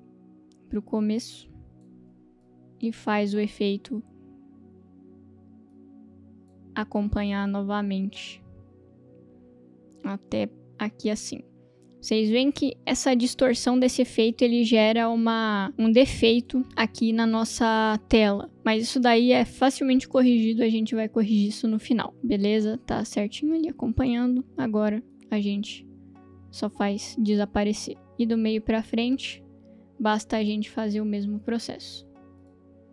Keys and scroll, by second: 2.4 space, 3.6 space, 30.6 space.